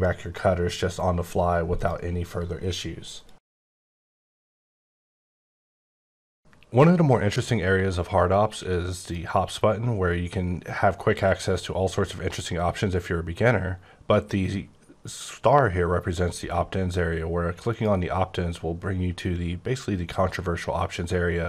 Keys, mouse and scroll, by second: 0.3 scroll down 5, 1.7 click, 17.6 click.